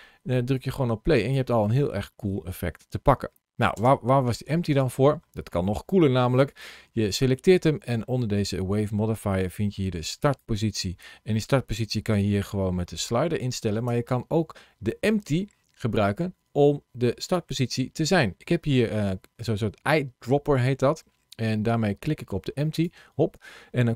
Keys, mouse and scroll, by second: 0.4 click, 1.3 space, 3.6 space, 4.5 click, 6.3 click, 10.1 click, 17.1 click.